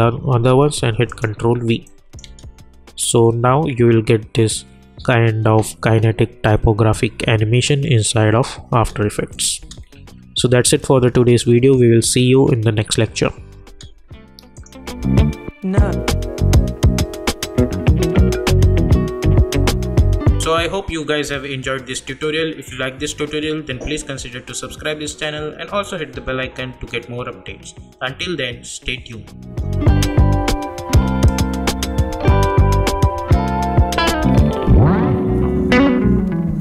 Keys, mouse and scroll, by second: 1.1 click, 2.2 space, 8.7 space, 9.3 click, 9.6 space, 13.6 space.